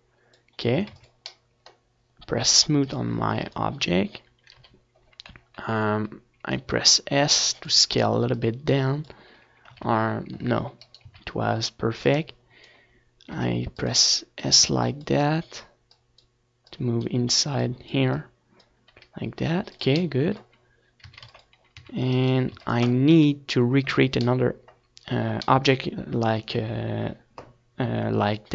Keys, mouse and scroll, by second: 1.8 s, 2.8-5.4 drag, 2.8 z, 4.8 ctrl+z, 5.4 s, 6.0-7.7 right drag, 6.1 ctrl+z, 6.9-16.3 drag, 8.4 r, 13.8 r, 14.8 middle click, 15.9 a, 16.1 ctrl+s, 16.6 z, 17.0-18.6 right drag, 17.4 ctrl+s, 17.9 KP_1, 24.9 ctrl+s.